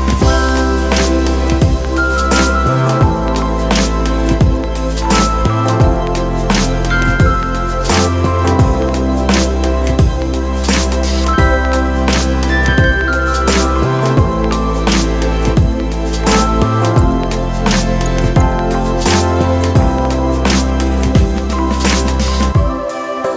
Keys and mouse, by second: 14.4 click, 16.9 click, 18.1-21.1 drag, 21.5 click, 22.1 click.